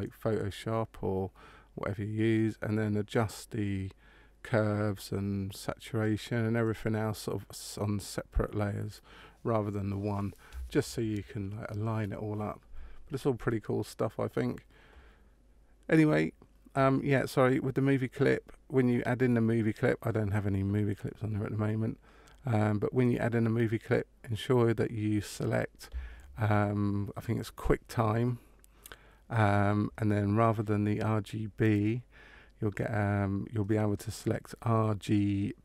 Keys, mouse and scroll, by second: 31.5 click.